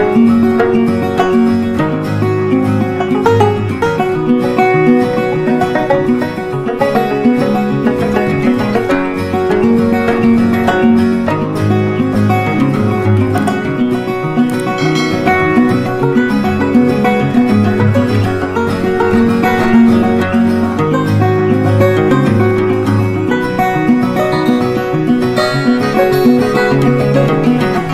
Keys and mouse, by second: 0.5-9.5 drag, 9.5-14.2 drag, 14.2 click, 16.3-24.1 shift+drag.